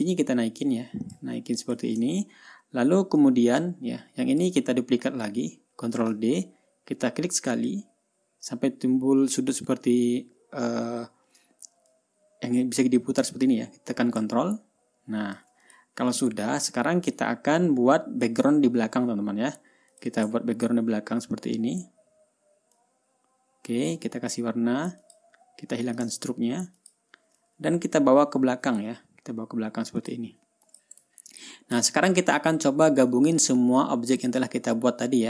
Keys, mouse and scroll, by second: 0.5-1.8 drag, 2.1 drag, 2.6 ctrl+scroll up 2, 3.1-3.7 ctrl+scroll down 1, 3.7-5.0 ctrl+drag, 6.4 ctrl+d, 8.1 click, 12.4-16.0 drag, 16.1 ctrl+click, 16.7-17.0 ctrl+scroll down 1, 17.2 ctrl+scroll up 1, 18.0-18.3 ctrl+scroll up 1, 18.8-19.1 ctrl+scroll down 1, 20.4 click, 20.9 ctrl+scroll up 2, 23.2-24.5 drag, 25.5 click, 27.3 shift+click, 29.1 click, 30.5 click, 31.1 click, 31.7 ctrl+scroll down 1, 32.1-32.4 ctrl+scroll up 1, 33.3 ctrl+scroll down 1.